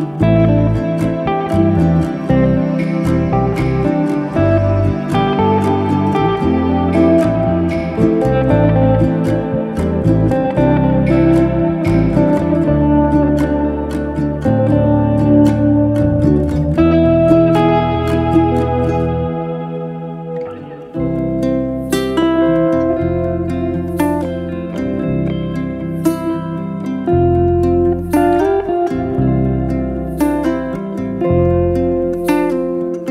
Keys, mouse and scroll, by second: 0.2 s, 2.9 click, 3.3 middle click, 3.8 m, 4.2 middle click, 4.9 ctrl+z, 5.4 click, 6.0 middle click, 7.0-8.5 middle drag, 9.4 Tab, 10.1 KP_Divide, 10.6 scroll down 2, 10.8-11.4 middle drag, 11.4 Tab, 12.3 3, 12.4 drag, 12.6 scroll down 1, 12.9-13.4 middle drag, 13.4 s, 15.6-16.5 scroll up 2, 16.5 alt+h, 18.2 KP_Divide, 18.9-20.4 middle drag, 20.5 alt+h, 21.3 scroll down 1, 21.5 middle click, 22.2 scroll up 2, 22.4-23.9 middle drag, 24.7 Tab, 25.4 g, 27.1-28.5 middle drag, 28.5 s, 29.6-30.4 middle drag, 30.4-30.7 scroll down 6, 30.7-31.5 middle drag, 31.5 scroll up 1, 32.0-33.1 middle drag.